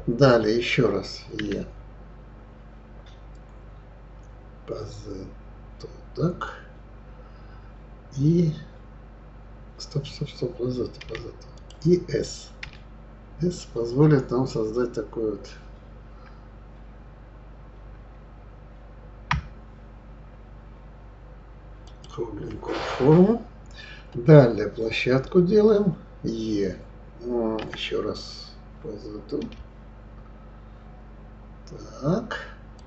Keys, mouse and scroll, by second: 1.4 e, 27.6 e.